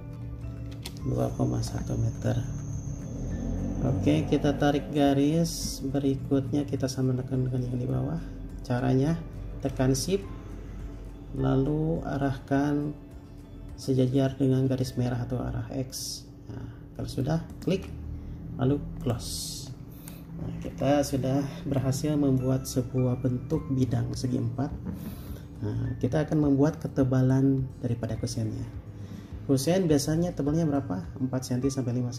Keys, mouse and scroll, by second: 0.0-0.1 typing, 0.9 Return, 17.7 shift+click, 20.9 space, 20.9-21.3 scroll up 1.